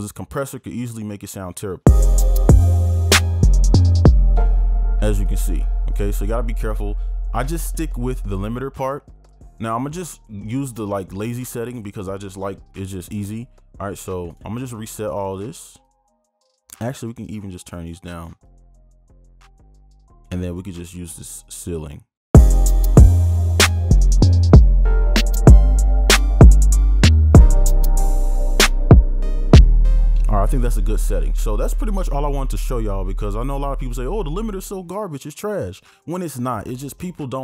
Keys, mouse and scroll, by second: 1.9 space, 4.5 space, 5.3 right click, 14.5 right click, 18.3 double click, 22.5 space, 30.1 space.